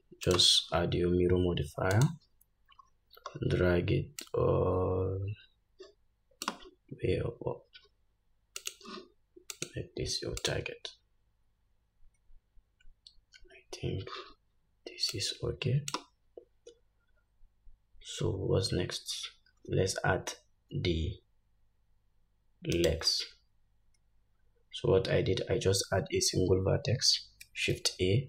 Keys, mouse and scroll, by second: 0.5-6.7 drag, 3.0-3.6 scroll down 5, 4.4 scroll down 1, 8.8 click, 10.6 click, 15.4-28.2 drag, 23.0 shift+right click, 27.9 shift+a.